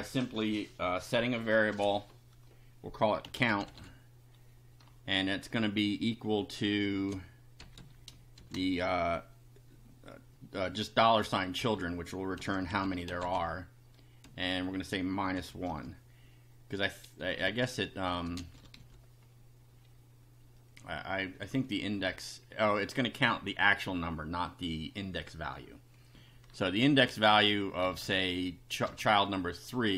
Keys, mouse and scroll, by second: 3.0-4.3 typing, 6.9 space, 7.8 space, 8.4 shift+4, 11.6-14.3 typing, 15.4 -, 15.7 1, 17.5-19.3 typing, 22.0 Down, 26.1 Up, 26.9 shift+Home, 27.8 shift+BackSpace, 28.8 shift+BackSpace.